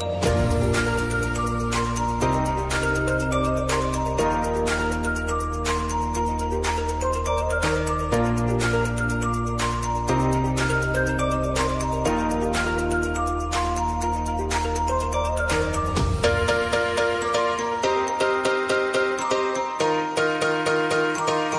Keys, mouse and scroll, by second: 1.1-14.3 drag, 14.3 ctrl+alt+Home, 15.9 click, 21.4 right click.